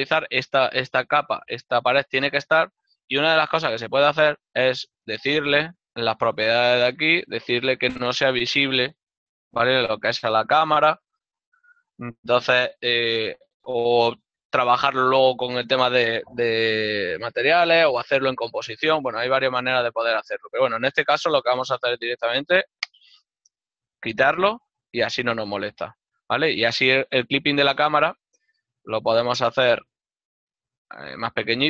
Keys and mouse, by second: 8.7 middle click, 24.5 middle click, 26.0 KP_0, 27.2 ctrl+middle click, 28.3 right click, 29.2 click.